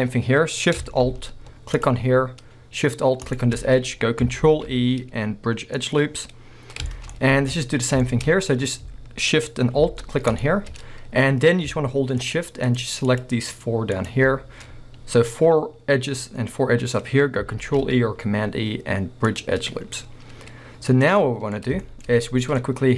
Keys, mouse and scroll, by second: 1.8 alt+shift+click, 3.3 alt+shift+click, 4.5 ctrl+e, 6.1-6.8 scroll down 1, 7.1 scroll down 1, 7.4 alt+a, 7.7 scroll up 1, 8.0 shift+middle click, 10.3 alt+shift+click, 11.0 scroll up 1, 11.4 scroll down 1, 12.2 shift+click, 12.7 shift+click, 13.1 shift+click, 14.0 shift+click, 17.6 ctrl+e, 20.0-21.2 scroll up 2, 21.2-21.6 middle drag, 21.6 scroll up 2, 22.3-22.9 middle drag.